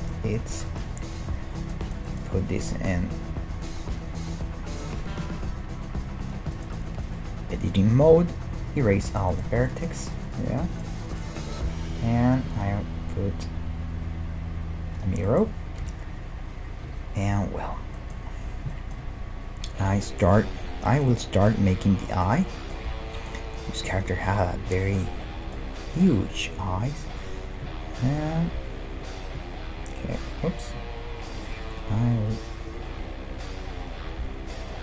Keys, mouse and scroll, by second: 2.0-4.6 middle drag, 5.2-6.8 drag, 6.5-8.6 middle drag, 8.1 x, 9.0-12.2 middle drag, 11.9-14.4 drag, 15.3-17.3 middle drag, 15.9 KP_1, 17.1 KP_5, 17.5-20.0 middle drag, 28.0-29.8 drag, 31.8-33.7 middle drag.